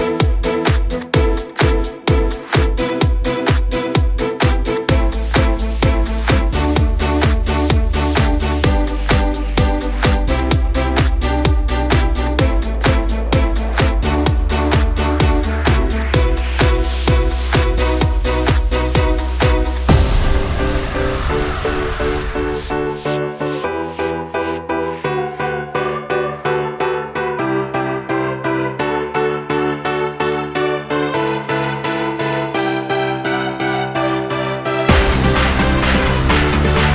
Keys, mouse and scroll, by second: 0.1 i, 3.0 right click, 3.5-5.4 middle drag, 5.4 r, 11.9 s, 13.8 s, 15.5 r, 20.8-22.1 middle drag, 22.1 scroll up 1, 22.5 r, 26.6 scroll up 2, 26.9-28.4 middle drag, 28.4 ctrl+z, 29.3 scroll down 2, 29.6 middle click, 30.2-30.7 scroll up 1, 30.7-32.2 middle drag, 32.2 ctrl+z, 32.6 ctrl+z, 33.3 scroll down 2, 33.7 middle click, 34.6 ctrl+z, 35.7 i.